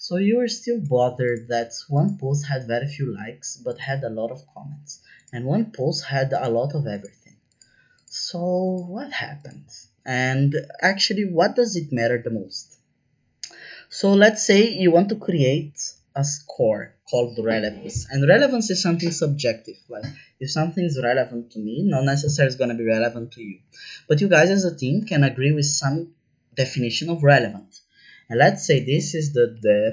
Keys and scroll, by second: 29.2-29.9 typing.